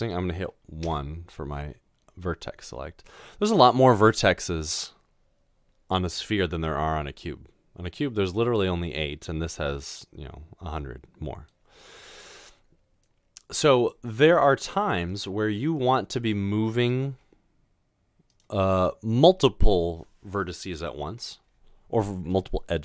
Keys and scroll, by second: 0.9 1, 17.1 typing.